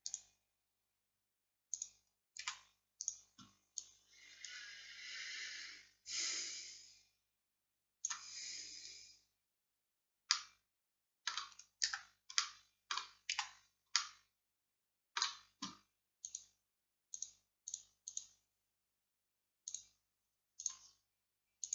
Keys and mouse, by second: 2.5 z, 10.4-13.4 drag, 11.9 Tab, 13.4 z.